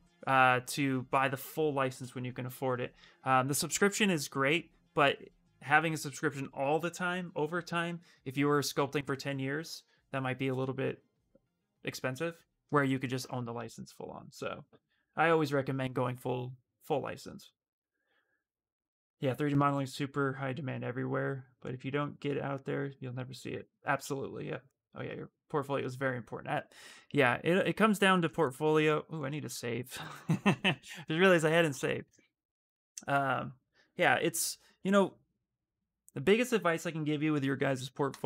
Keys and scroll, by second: 29.4 ctrl+s, 30.9 Return, 31.8 Return.